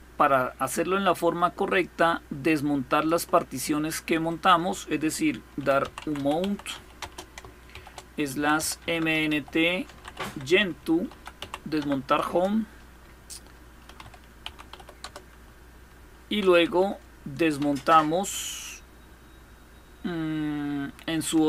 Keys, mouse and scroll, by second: 0.0-3.3 drag, 3.9 click, 5.0-11.9 typing, 11.9 Return, 13.3-15.7 typing, 16.3 Up, 17.3 Up, 20.9-21.4 typing.